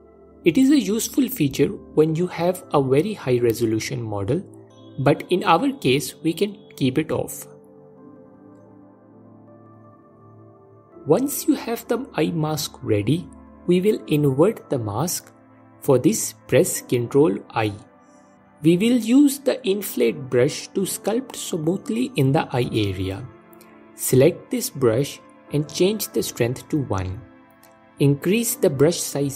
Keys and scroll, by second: 16.3 ctrl+i, 26.2 f.